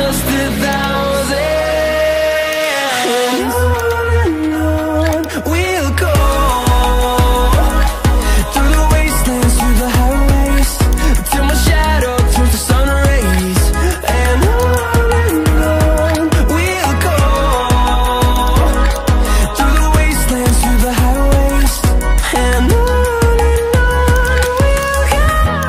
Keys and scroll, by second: 10.6 typing, 16.7 typing.